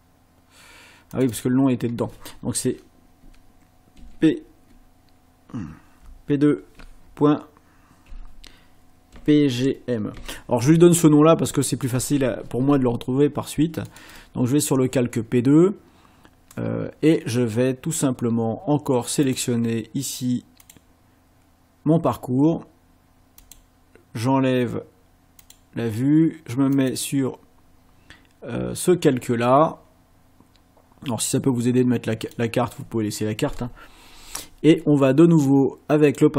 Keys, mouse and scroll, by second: 1.1 click, 4.0 shift+p, 6.7 2, 8.1 ., 9.1 p, 9.5 g, 10.6 m, 11.5 Return, 13.9 click, 19.3 click, 20.6 click, 23.4 click, 25.4 click, 26.7 click, 32.3 click, 36.1 click.